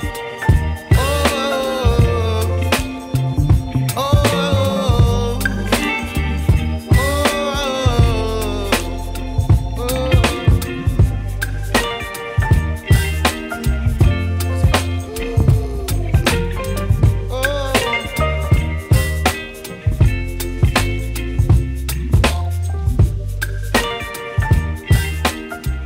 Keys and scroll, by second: 3.3 Return, 7.1 super+t, 7.8 shift+super+t, 14.5 shift+Return, 15.1 Return, 15.8 0.